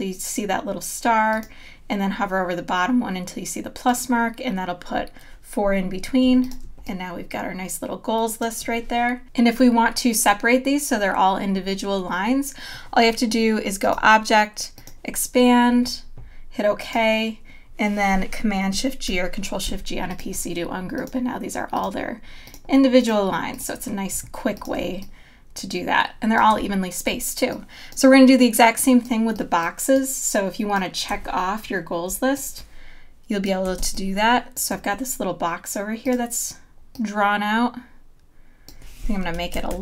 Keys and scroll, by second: 6.2 v, 6.6 space, 19.1 shift+super+g, 24.8 space, 33.8 space, 39.6 super+=.